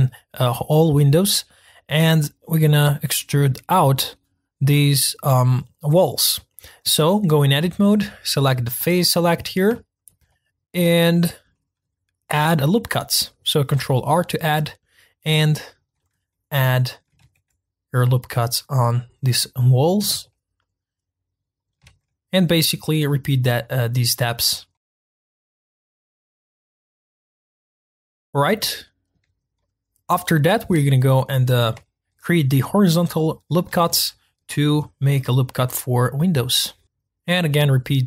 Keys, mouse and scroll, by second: 7.6 Tab, 8.6 click, 9.7-13.7 shift+middle drag, 13.7 ctrl+r, 16.3 middle click, 17.2 ctrl+r, 20.1 ctrl+r, 21.8 ctrl+r, 24.7 middle click, 24.9 ctrl+r, 25.3 ctrl+r, 25.9 ctrl+r, 26.5 ctrl+z, 26.7 ctrl+r, 27.5 ctrl+r, 28.2 click, 28.7-30.7 shift+middle drag, 30.7-31.8 scroll up 1, 31.8-33.9 shift+middle drag, 33.9 ctrl+r, 36.9 ctrl+r.